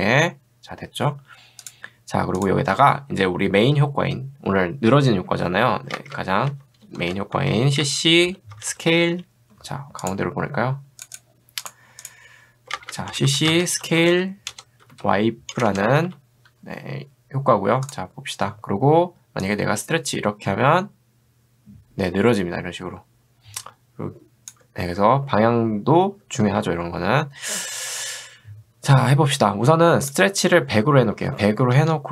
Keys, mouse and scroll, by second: 1.7 click, 5.9 ctrl+space, 6.5-9.6 typing, 10.0 click, 12.7 ctrl+space, 13.3-16.1 typing, 17.9 click, 19.5-24.5 drag, 26.5 ctrl+z, 31.0-32.0 typing.